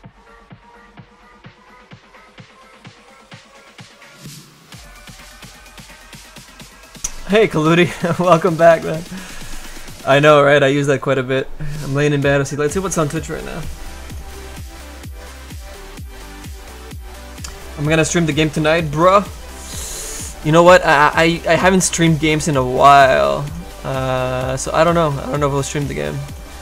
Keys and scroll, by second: 23.0 s.